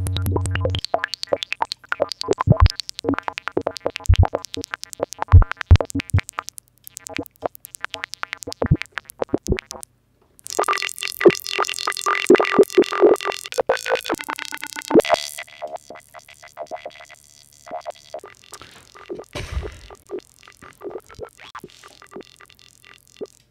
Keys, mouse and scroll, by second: 1.4-2.7 drag, 2.9 click, 4.5 click, 5.6-7.2 drag, 7.3 click, 12.6 click, 15.5 click, 16.2 click, 23.4 click.